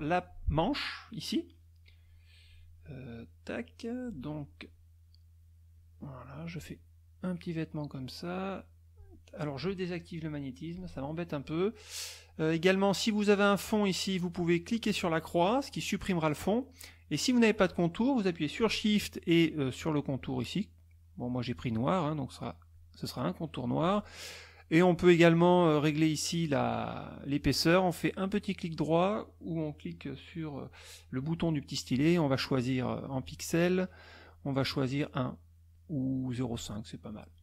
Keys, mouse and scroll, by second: 3.3 middle click, 5.7-6.7 drag, 7.9-9.2 drag, 10.7 click, 14.8 click, 19.8 shift+click, 20.9 shift+click, 21.5 shift+click, 22.7 shift+click, 28.3 right click, 33.2 click, 35.2 right click, 36.4 click.